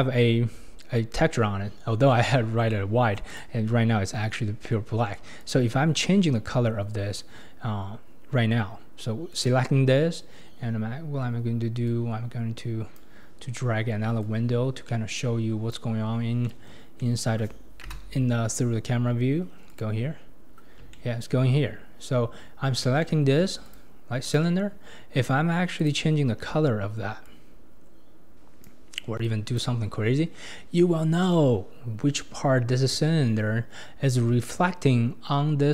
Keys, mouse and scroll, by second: 0.3-0.9 scroll up 1, 0.9-1.7 scroll up 1, 1.7-2.4 scroll up 1, 3.3-5.5 drag, 7.3-8.1 scroll up 2, 9.3 click, 11.9-16.2 drag, 16.2 scroll up 2, 16.4-17.9 middle drag, 17.9 KP_0, 18.7-19.8 scroll up 3, 19.8 click, 20.2 scroll up 4, 20.9-21.6 shift+middle drag, 21.6-22.6 scroll up 2, 22.6-23.0 scroll up 1, 23.0-23.7 shift+middle drag, 23.7 click, 24.3 click, 25.8 click, 27.7 click, 31.9-33.2 scroll up 1, 33.2-34.9 scroll up 1.